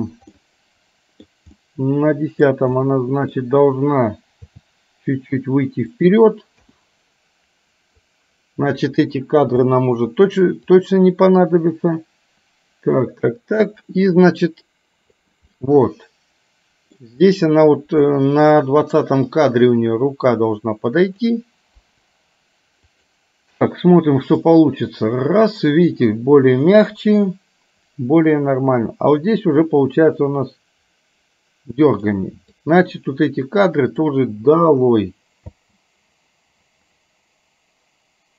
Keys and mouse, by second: 0.4 middle click, 1.6 middle click, 2.8 middle click, 4.5 g, 6.6 i, 8.0-9.0 drag, 9.6 Delete, 10.8-15.4 drag, 15.6-17.0 middle drag, 17.4 middle click, 19.4-21.3 drag, 21.9 Delete, 23.0 click, 24.5-32.3 drag, 32.6-34.0 drag, 34.8 Delete, 35.8 space.